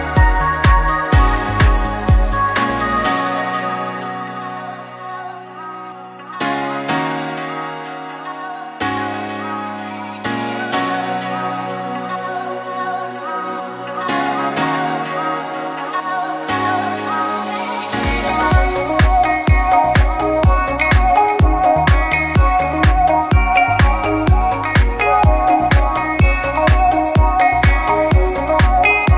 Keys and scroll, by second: 1.7-4.3 typing, 5.4-8.8 typing.